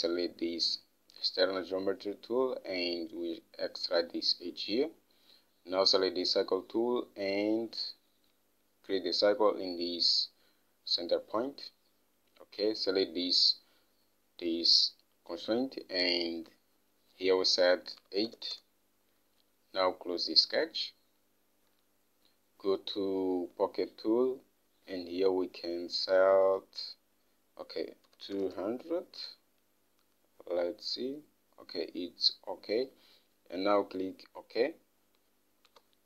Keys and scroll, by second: 18.4-19.2 typing, 28.5-29.3 typing, 30.8-33.8 typing.